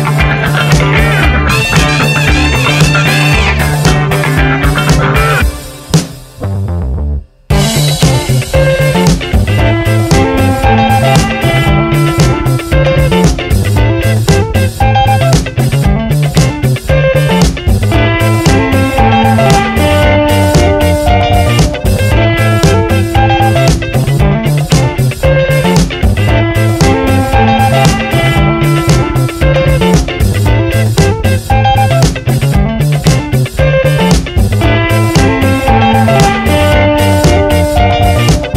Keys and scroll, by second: 1.7 Return, 2.8 v, 3.0 Up, 3.3 Right, 3.8 Up, 5.8 Down, 7.5 Return, 8.7 alt+Tab, 14.8 Tab, 15.3 alt+Tab, 15.6 space, 18.4 alt+Tab, 19.9 space, 20.9 Tab, 21.8 Tab, 27.8 ctrl+t, 35.5 Return, 35.8 Up, 37.0 Down, 37.4 Up, 37.6 Down, 38.4 Up.